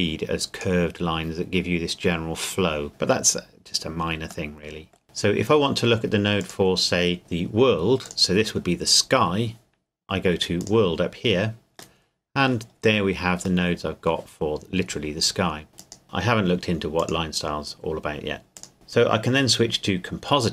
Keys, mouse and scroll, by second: 2.9 middle click, 3.8 scroll up 1, 3.9 scroll down 1, 4.2-5.0 scroll up 1, 6.4 click, 8.0 click, 10.6 click, 12.0 middle click, 12.7-13.6 scroll up 1, 13.6 middle click, 15.8 click.